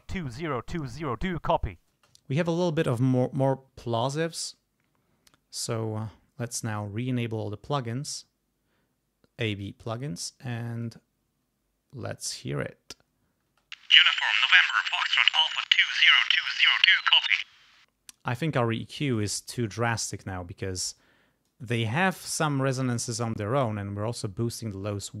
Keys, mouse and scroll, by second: 0.0-0.7 ctrl+scroll up 2, 1.9 space, 2.2 ctrl+scroll down 2, 2.5 ctrl+click, 3.4 alt+6, 4.8 alt+7, 6.7 right click, 9.6 click, 10.8 click, 13.5 space, 15.2 ctrl+scroll up 2, 16.4 ctrl+g, 16.5 ctrl+scroll down 2, 17.6 space, 19.0 click, 19.8 click, 21.0 click, 22.3 click, 23.6-25.0 drag.